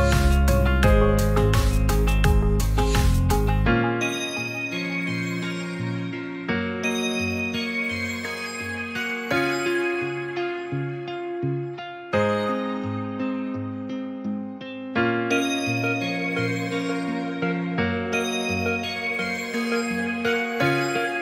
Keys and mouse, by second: 4.1 Tab, 5.8 i, 6.9 e, 8.0 click, 10.7 click, 12.6 e, 12.9 click, 13.9 s, 17.7 click, 18.1-19.5 middle drag, 19.8 e, 20.2 click, 20.9-21.2 middle drag.